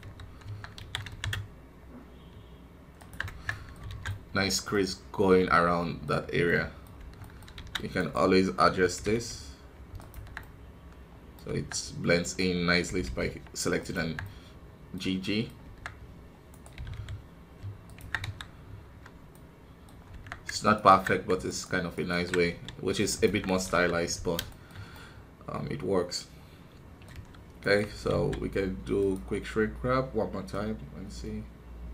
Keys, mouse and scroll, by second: 0.4 Tab, 3.4 middle click, 3.8 alt+a, 4.0-6.0 middle drag, 6.0-6.4 scroll up 3, 6.4 middle click, 7.4-8.9 scroll up 1, 8.9-10.1 scroll up 1, 10.1 scroll up 1, 10.3-11.4 middle drag, 11.4 Tab, 12.2 right click, 12.8 g, 14.2-15.6 middle drag, 15.6 Tab, 16.4 right click, 16.7 g, 18.2 KP_1, 18.4 scroll down 1, 19.3 middle click, 19.9 scroll up 1, 20.1 Tab, 20.7-22.4 alt+right drag, 22.4 s, 23.6 KP_1, 23.9-24.4 scroll down 1, 24.4-27.1 shift+middle drag, 27.1 KP_1, 27.6 right click, 27.8 Tab, 28.9-31.9 drag.